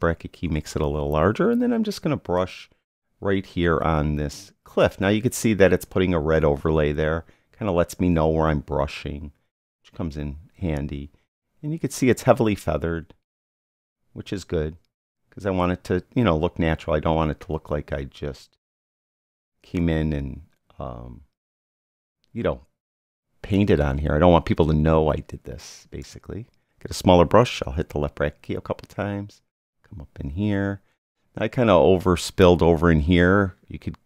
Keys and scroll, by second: 0.5 [, 27.6 [.